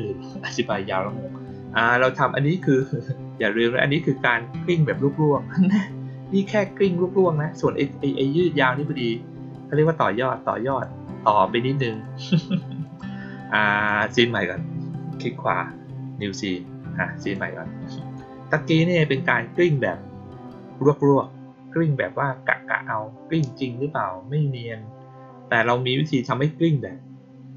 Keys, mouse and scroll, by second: 8.8 click, 9.6 click, 10.6 click, 11.8 click, 12.8 click, 13.8 right click, 16.1 click, 17.1 click.